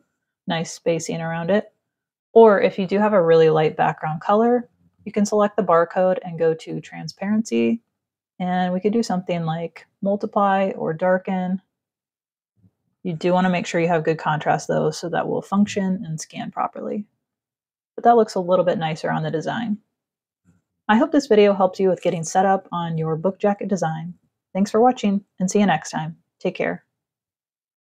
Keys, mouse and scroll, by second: 0.0 click, 4.3 click, 6.2 click, 7.4 click, 9.2 click, 10.2 click, 10.9 click, 11.7 click, 13.7 ctrl+-, 15.7 click, 16.0-16.6 scroll up 1, 16.8 space, 16.9 click, 26.8 click.